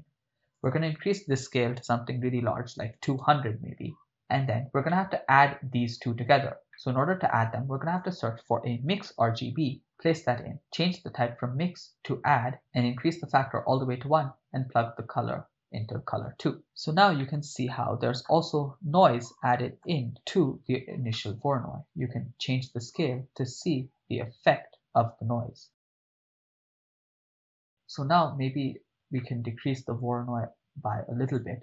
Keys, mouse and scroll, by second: 0.6-3.2 drag, 3.9 middle click, 4.9 middle click, 6.7 middle click, 7.5 shift+a, 10.8-12.6 drag, 13.0-13.7 drag, 15.3-16.6 drag, 17.2-18.2 middle drag, 18.8 KP_7, 19.7 shift+middle click, 21.6 ctrl+middle click, 21.8 middle click, 23.0-27.5 drag, 27.5 0, 30.4 ctrl+middle click, 31.3-31.6 drag.